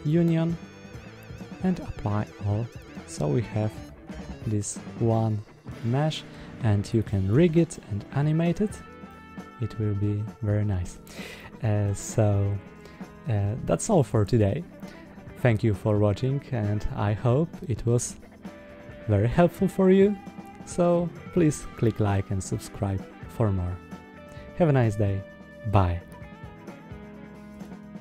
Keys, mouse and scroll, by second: 1.5-2.3 drag, 2.9 middle click, 3.6 click, 4.0 Tab, 4.5-6.2 middle drag, 6.8 click, 7.2 Tab, 7.6-8.4 middle drag, 8.9-10.8 middle drag, 11.2-11.7 middle drag.